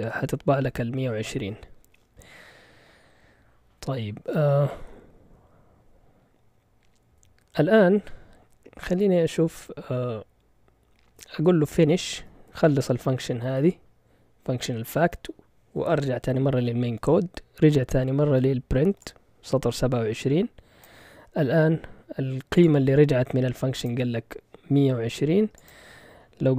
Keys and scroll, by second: 11.5-13.5 typing, 14.9 Return.